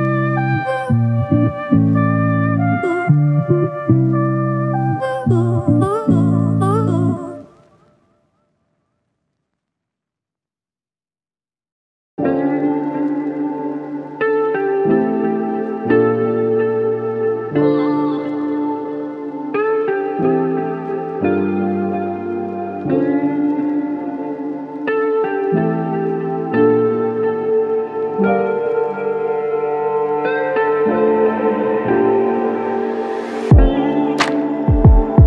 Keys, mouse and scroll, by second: 0.5 shift+click, 3.0 f, 6.1 double click, 7.7 ctrl+click, 10.8 double click, 13.8 ctrl+click, 17.3 ctrl+click, 18.1 double click, 19.1 ctrl+click, 24.1 double click, 24.8 shift+click, 25.7 ctrl+alt+click, 26.4 alt+click, 27.7 ctrl+alt+click.